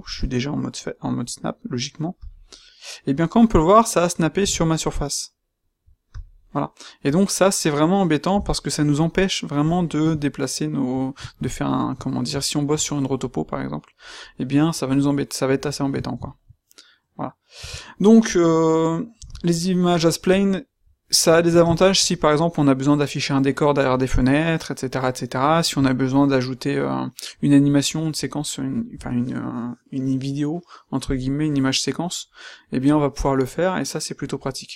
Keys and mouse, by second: 2.6 middle click, 4.3 g, 6.4 middle click, 7.2 middle click, 8.3 g, 10.4 middle click, 12.9-14.4 middle drag, 15.1-17.5 middle drag, 17.5 Tab, 19.2 x, 21.2-22.1 middle drag, 25.7-26.5 middle drag.